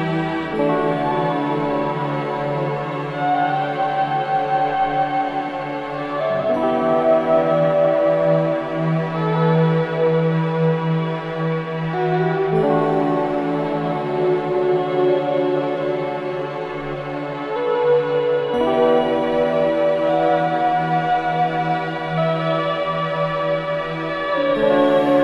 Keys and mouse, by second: 1.9-2.9 right drag, 4.0-6.2 right drag, 6.2 Escape, 7.2 click, 8.5 click, 9.6 click, 10.4 click, 12.2 click, 13.4 click, 14.1 middle click, 14.5 click, 15.4 click, 16.2 click, 16.8 click, 17.9 click, 18.7 click, 19.5-20.2 drag, 21.3 ctrl+s, 22.2 click, 22.5 space.